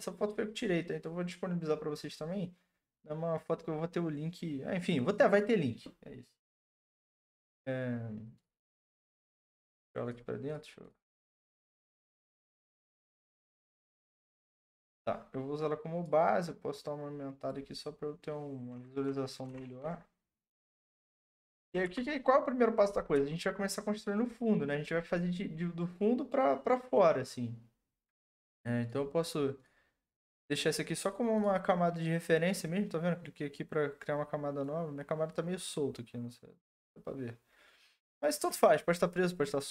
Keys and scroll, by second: 19.5 Return, 20.9 Up, 21.1 Up, 21.3 Up, 21.4 Up, 21.6 Up, 21.8 Right.